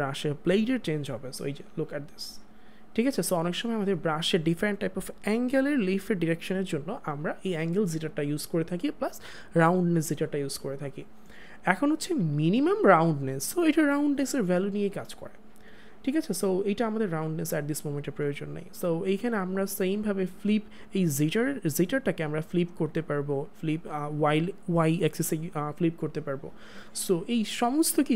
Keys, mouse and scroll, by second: 12.6 click, 15.3 click, 22.1 click.